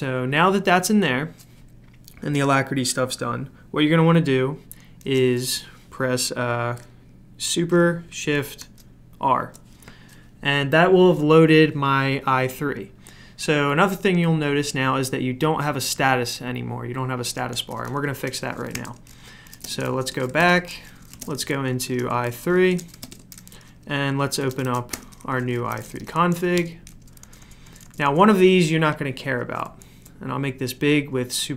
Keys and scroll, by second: 8.6 super+r, 18.4-27.8 typing, 28.9-30.0 typing, 29.8 super+f.